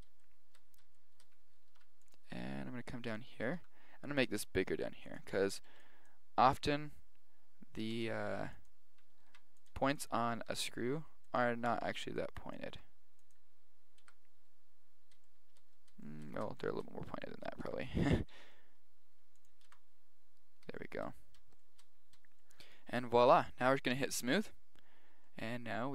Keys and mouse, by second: 0.2-2.8 middle drag, 1.7 ctrl+r, 3.5 s, 5.3 a, 5.6 b, 7.9 g, 9.2 ctrl+r, 10.5 s, 11.7 a, 11.9 b, 12.7 g, 13.7-15.0 middle drag, 14.2 Tab, 15.1 middle click, 17.7 Tab, 18.3 g, 18.4 middle click, 19.8 Tab, 20.0-21.0 middle drag, 23.7-24.1 middle drag, 24.1-25.9 drag.